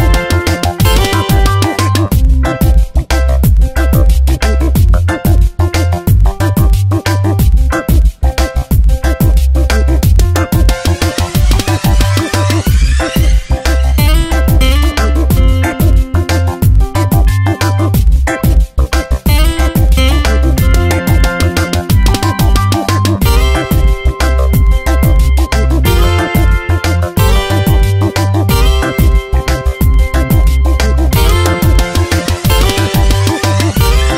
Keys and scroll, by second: 0.6 ctrl+z, 5.5 Tab, 5.8 space, 7.5 ctrl+z, 14.3 Tab, 19.3 ctrl+t, 20.8 ctrl+z, 23.4 ctrl+shift+], 24.3 ctrl+t, 25.8 ctrl+z, 26.2 Tab, 27.7 Tab, 29.1 ctrl+z, 30.0 ctrl+z, 30.7 /, 31.1 shift+Up, 31.9 ctrl+t, 33.2 Return, 33.5 ctrl+z, 33.8 Tab.